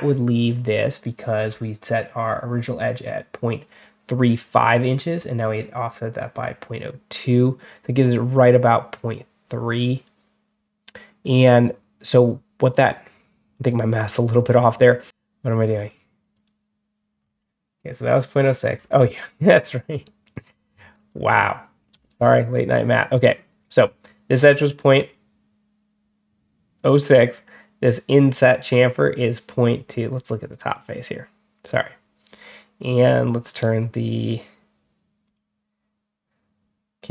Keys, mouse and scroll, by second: 1.3 middle click, 1.3 scroll up 1, 5.0 middle click, 17.0 scroll up 1, 18.6 scroll down 2, 20.5 click, 30.4 click, 33.0 click, 34.0 click, 35.1 click.